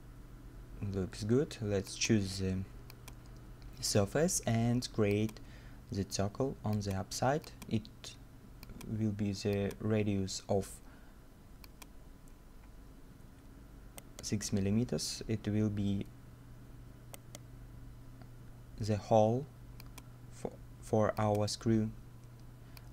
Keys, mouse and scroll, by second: 1.3 scroll up 1, 14.0 right click, 15.1-16.4 scroll down 1, 16.8 middle click, 17.2 right click, 18.6 scroll up 1.